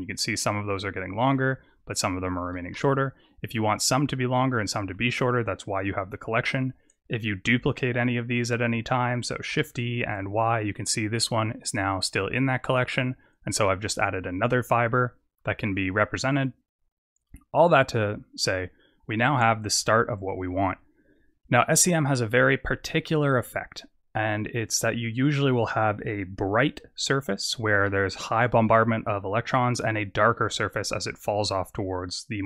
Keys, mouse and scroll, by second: 1.9 click, 2.4 s, 5.1 click, 6.4 click, 8.4 click, 9.4 shift+d, 12.4 click, 13.4 click, 14.6-16.4 scroll up 7, 18.4 KP_0, 19.2-20.8 scroll up 11, 20.8-21.4 scroll up 2, 21.4-22.7 scroll up 2, 22.7-23.4 scroll down 6, 23.4-23.9 scroll down 4, 24.5-26.4 scroll up 1.